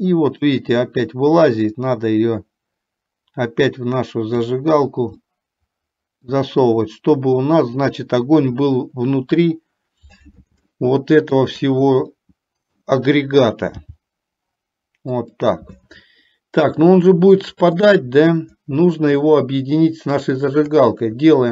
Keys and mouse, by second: 2.3-4.8 drag, 5.3-6.5 middle drag, 10.9 shift+middle click, 12.4-13.4 middle drag, 14.0 g, 17.3 middle click, 20.4 shift+click.